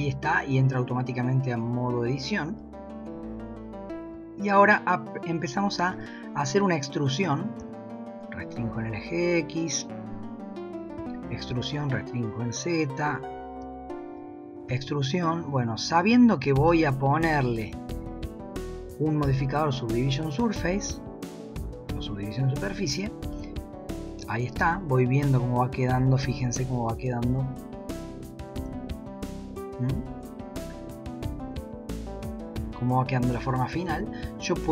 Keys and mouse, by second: 2.6 shift+middle click, 4.3 shift+middle click, 5.9 e, 11.0 e, 13.7 shift+middle click, 16.7-17.0 shift+middle drag, 18.3 drag, 19.2-21.7 drag, 23.4 shift+middle click, 23.5 shift+click, 26.3 a, 27.6 click, 28.7 g, 31.7 Tab, 34.2 Tab.